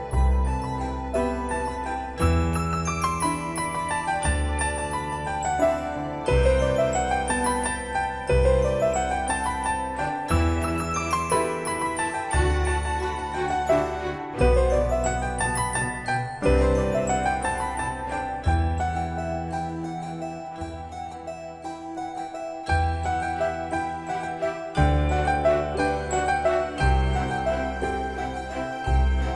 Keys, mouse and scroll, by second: 3.1-3.9 typing, 4.8 Return, 6.6 Escape, 7.2 middle click, 8.1-10.2 scroll down 1, 15.0-16.5 typing, 17.6-18.1 scroll up 1, 18.5-18.8 scroll down 1, 20.9 ctrl+s, 24.7-26.7 typing.